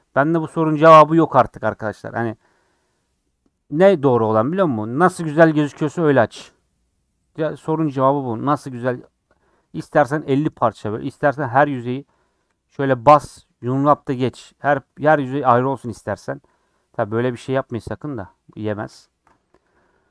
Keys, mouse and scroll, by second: 2.0 click, 2.5 click, 9.1-12.4 middle drag, 12.4 a, 14.0 u, 18.9 ctrl+z, 19.9 Tab.